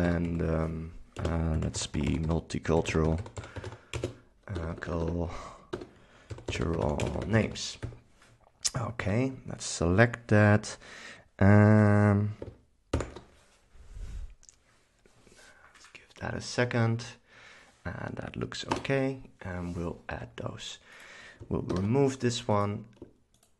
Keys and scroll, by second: 0.0-4.7 typing, 6.2-8.5 typing, 9.1 super+a, 13.1 ctrl+super+s, 13.5 c, 18.8 Return, 19.2 v, 21.8 shift+super+BackSpace.